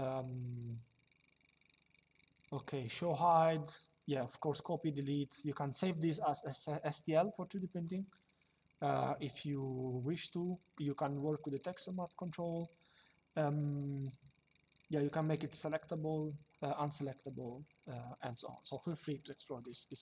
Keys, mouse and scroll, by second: 19.3 click.